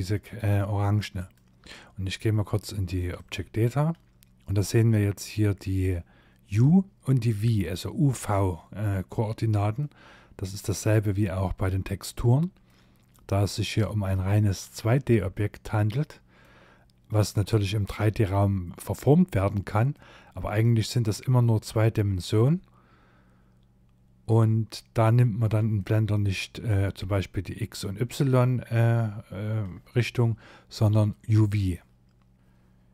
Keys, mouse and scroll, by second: 0.2 shift+click, 2.2 click, 3.1-3.5 scroll up 3, 8.8 middle click, 10.0 shift+middle click, 11.7 middle click, 24.2-24.7 scroll down 2, 24.8 shift+middle click, 32.3 middle click.